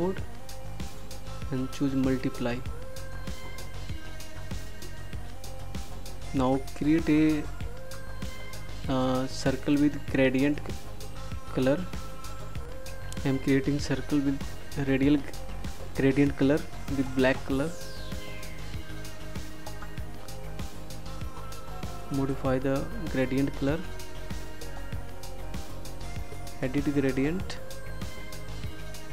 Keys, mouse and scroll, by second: 0.3 click.